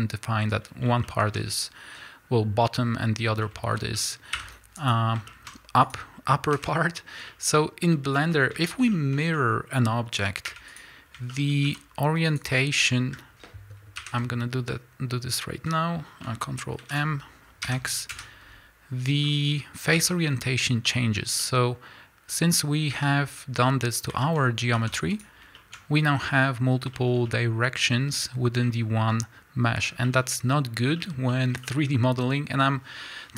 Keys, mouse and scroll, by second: 1.0-5.9 shift+middle drag, 4.9 x, 5.9 click, 6.5 KP_Decimal, 7.3-10.8 middle drag, 7.6-8.2 scroll up 2, 8.6 Tab, 10.5 3, 10.8 click, 11.3 shift+middle click, 11.7 shift+d, 12.6 middle click, 15.5 alt+m, 16.8 ctrl+m, 18.2 KP_Enter, 19.3 middle click, 20.0 Tab, 20.3 middle click, 21.3 scroll down 1, 21.3-33.3 middle drag, 22.9 Tab, 24.4 scroll up 2, 25.2 x, 29.0-29.8 scroll up 2, 29.8 scroll down 2, 30.8 scroll down 1, 32.3-33.3 scroll up 1.